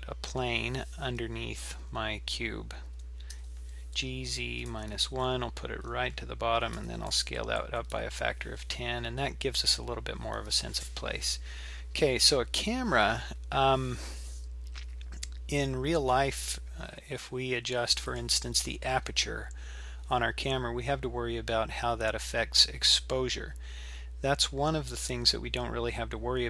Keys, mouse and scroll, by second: 3.3 g, 6.8 s, 18.1 click.